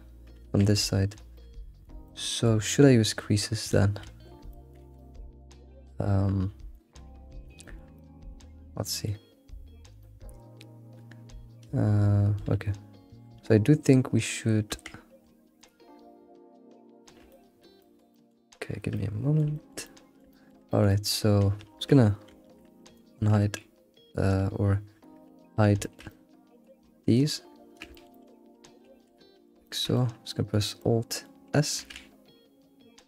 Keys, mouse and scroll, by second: 0.8 alt+shift+z, 1.0-3.6 shift+middle drag, 3.6 click, 4.1 alt+shift+z, 4.5 middle click, 4.8 alt+shift+z, 4.9-9.3 middle drag, 10.0-13.4 middle drag, 13.4 Tab, 14.8 Tab, 15.7 alt+click, 16.4-17.3 scroll down 5, 17.3-22.3 shift+middle drag, 22.3 shift+h, 25.8-27.7 shift+middle drag, 28.1 alt+middle click, 29.6-31.8 middle drag, 31.8 alt+s.